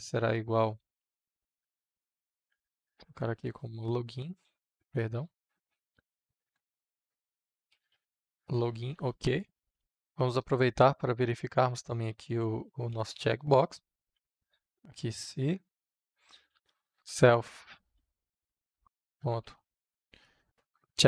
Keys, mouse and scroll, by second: 0.7 space, 1.6 shift+~, 2.7-4.2 typing, 4.5 Return, 5.5-9.2 typing, 6.8 Return, 9.9 Return, 10.5 i, 11.4 f, 12.8-14.6 typing, 16.2 l, 17.8-20.2 typing, 20.8 Down.